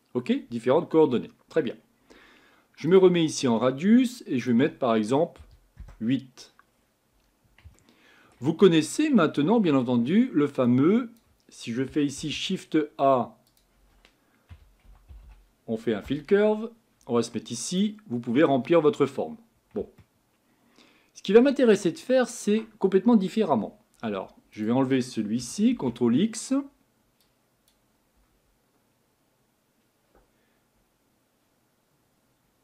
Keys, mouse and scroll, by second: 5.8 click, 6.7-7.8 scroll down 5, 7.8-16.1 shift+middle drag, 16.1 l, 18.2 scroll up 4, 18.8 scroll down 2, 20.0-25.7 shift+middle drag, 25.7 ctrl+x.